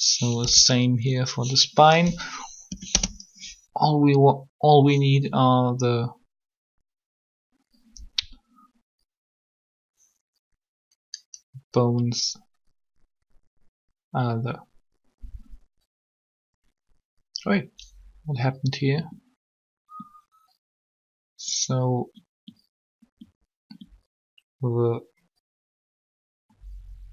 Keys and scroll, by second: 0.4 b, 2.6 Delete, 2.7 Return.